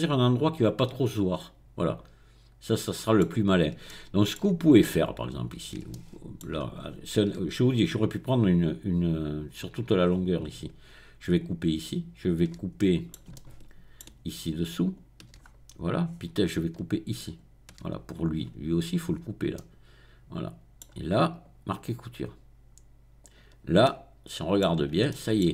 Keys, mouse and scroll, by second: 3.6 shift+middle click, 5.2 click, 6.8-7.6 scroll up 3, 9.5-10.0 scroll down 2, 10.0-10.8 scroll up 2, 11.4 shift+middle click, 12.8-14.0 right drag, 14.0 shift+middle click, 14.8 shift+click, 15.1 shift+middle click, 15.4-16.1 scroll down 1, 16.1-16.6 scroll up 1, 16.6 scroll up 1, 16.9 shift+middle click, 17.2 shift+click, 19.0-19.5 scroll down 2, 19.5-21.1 middle drag, 21.3 right click, 23.2 click, 23.6-24.6 middle drag, 24.6-25.1 scroll down 1, 25.1 shift+middle click.